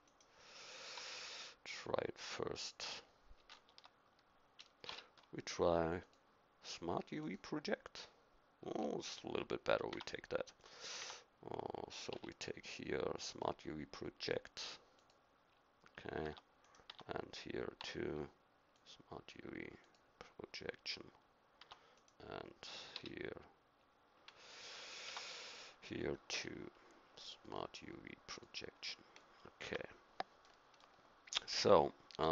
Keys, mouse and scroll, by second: 0.1-2.1 right drag, 1.0 u, 3.7 Tab, 4.9 u, 9.9 Tab, 10.6-14.2 drag, 11.0 Tab, 12.1 u, 16.3 Tab, 16.6-20.0 right drag, 16.9 Tab, 17.8 u, 21.6 Tab, 22.0-23.8 right drag, 23.0 u, 25.1 Tab, 26.3 u, 29.6 Tab, 30.5-32.3 middle drag.